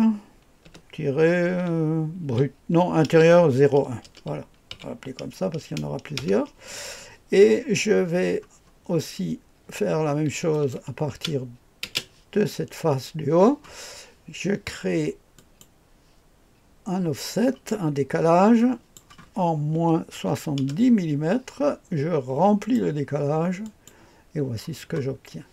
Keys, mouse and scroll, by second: 0.6 typing, 2.2-4.7 typing, 6.1 Return, 10.5 click, 11.1 space, 11.8 space, 15.4 click, 18.6 click, 19.7 KP_Subtract, 20.1 KP_7, 20.6 KP_0, 22.6 click, 23.6 click, 24.9-25.5 scroll down 2.